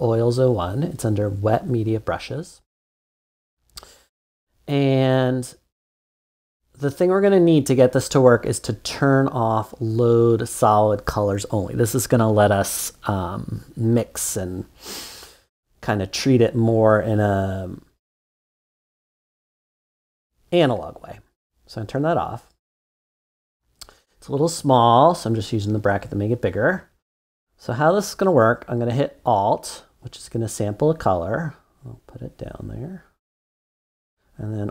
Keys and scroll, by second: 24.7-25.5 typing.